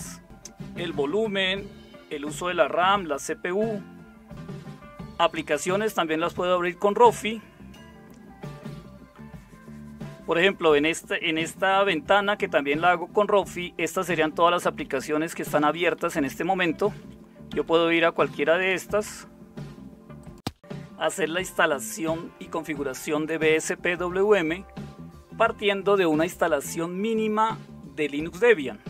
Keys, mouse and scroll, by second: 4.3 click, 4.3 alt+super+d, 14.2 Down, 14.7 Down, 14.9 Down, 15.1 Down, 15.3 Down, 15.6 Down, 16.0 Up, 16.1 Up, 16.3 Up, 16.5 Up, 16.6 Up, 16.8 Up, 17.5 Down, 17.7 Down, 18.3 Down, 18.5 Up, 18.7 Up.